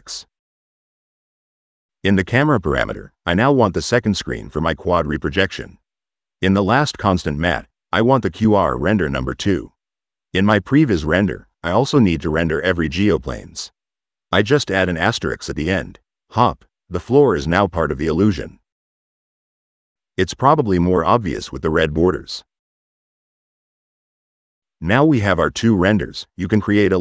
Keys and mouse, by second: 2.3 click, 2.8 click, 6.6 click, 7.0 click, 7.6 click, 9.0 click, 10.2 middle click, 11.1 click, 11.6 click, 12.9-13.9 drag, 14.1-16.4 drag, 17.8 middle click, 18.1 click, 18.8 right click, 20.3 click, 21.1 click, 21.7 middle click, 21.9 right click, 22.0 click, 22.7 middle click, 22.7 click, 23.6 click, 24.0 click, 25.7 click, 26.3 l, 26.7 a.